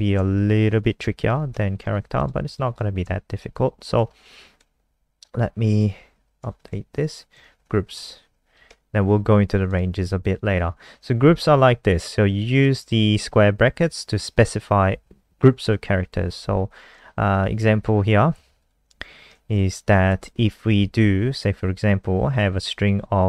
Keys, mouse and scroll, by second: 0.3 shift+Home, 0.5 shift+Home, 0.7 shift+Up, 0.8 shift+Up, 1.0 shift+Up, 1.2 shift+Up, 2.0 ctrl+c, 2.1 click, 2.5 click, 3.2 shift+Home, 3.3 shift+Home, 3.5 shift+Up, 3.7 shift+Up, 4.5 ctrl+v, 4.7 Up, 4.8 Up, 5.0 Up, 5.7 click, 6.2 Down, 6.4 shift+End, 7.2-9.1 typing, 8.6 Home, 9.7 click, 9.9 ctrl+s, 10.9 Return, 12.6 click, 19.2 Right, 19.4 shift+End, 20.1 ctrl+c, 20.2 click, 20.5 ctrl+v, 22.4 click.